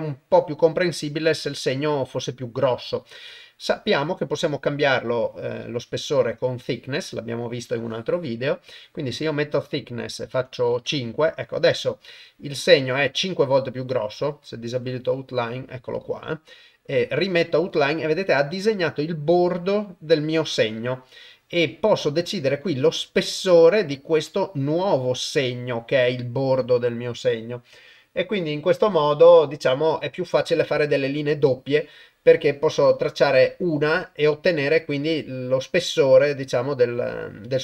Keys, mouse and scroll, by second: 3.9-6.7 drag, 7.9-8.7 drag, 9.6-10.7 drag, 22.8-27.5 drag, 34.4-37.2 drag.